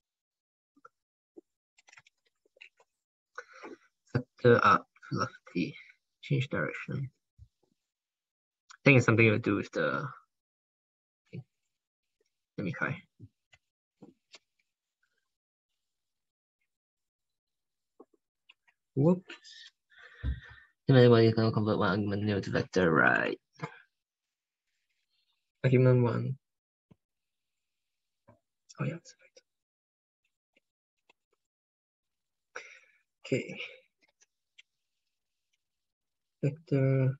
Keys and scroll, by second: 11.9 alt+Tab, 14.2 ctrl+k, 30.3 alt+Tab, 30.9 alt+Tab, 33.9 ctrl+k, 34.6 ctrl+Left, 34.8 ctrl+Left.